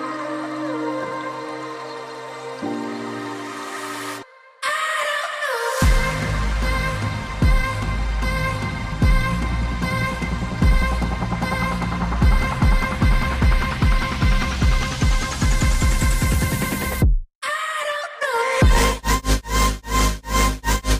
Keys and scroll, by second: 1.1 typing, 3.1 scroll, 4.9 ctrl+2, 6.7 5, 6.7 5, 6.8 Tab, 14.1 ctrl+alt+2, 20.7 ctrl+z.